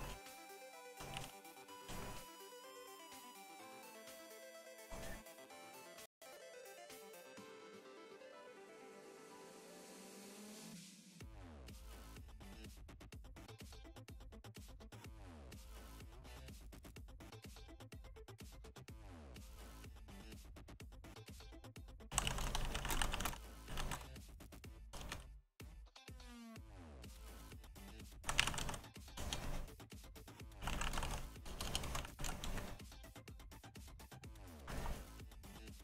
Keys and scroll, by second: 0.0-1.9 typing, 21.8-32.0 typing, 32.2 Return.